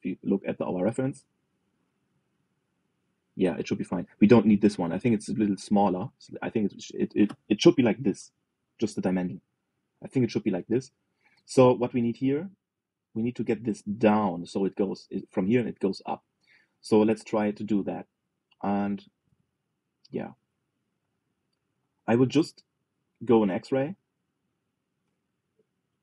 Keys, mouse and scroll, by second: 4.6 middle click, 5.1 shift+click, 5.4 shift+click, 5.7-6.8 middle drag, 6.8 e, 9.6-13.8 middle drag, 17.4-19.2 middle drag, 19.2 alt+z, 20.0 alt+z, 20.9 ctrl+z, 21.4-24.0 middle drag, 24.0 alt+z, 24.5 middle click, 25.2-26.0 drag.